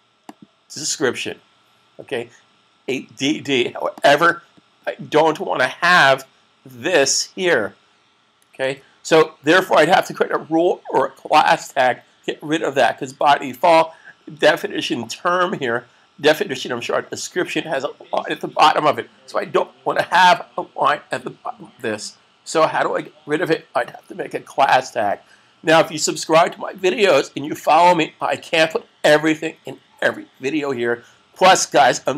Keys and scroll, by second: 8.4 super+s.